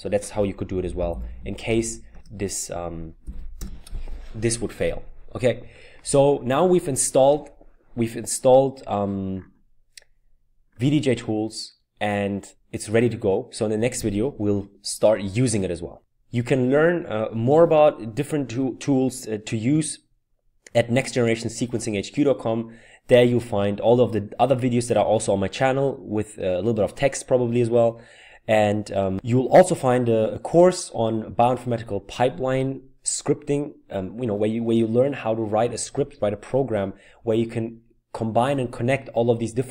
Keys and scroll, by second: 0.4-4.1 typing, 5.6-6.3 typing.